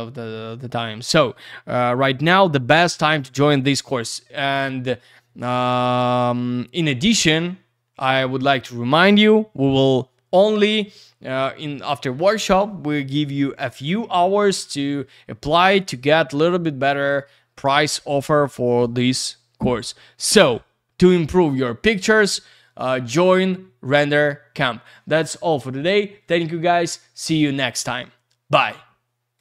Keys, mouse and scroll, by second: 24.8 click, 29.3 click.